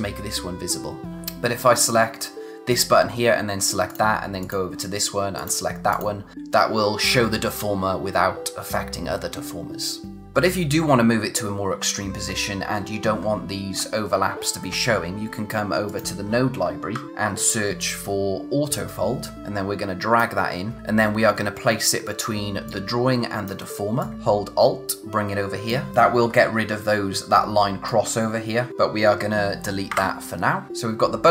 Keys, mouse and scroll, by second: 1.0 click, 3.8 click, 10.2 click, 10.3-11.6 scroll up 1, 12.2 scroll up 1, 13.1-13.5 scroll down 1, 14.4-15.6 scroll up 1, 15.8 click, 20.8 space, 22.6 click, 26.8-27.8 scroll up 1, 27.8 click, 30.7 space.